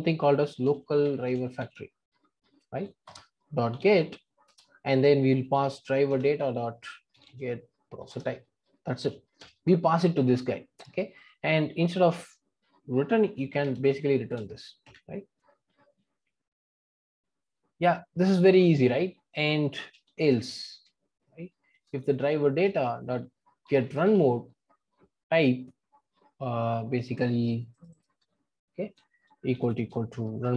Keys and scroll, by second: 3.1 Return, 22.6 Return.